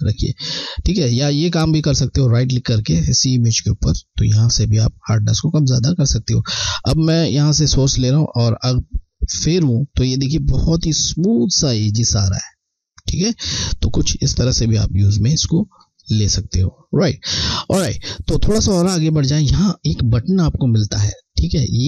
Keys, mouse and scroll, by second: 0.4 click, 5.5 click, 5.5 click, 7.5 alt+click, 8.4 click, 15.1 alt+scroll down 1, 15.7 alt+scroll down 1.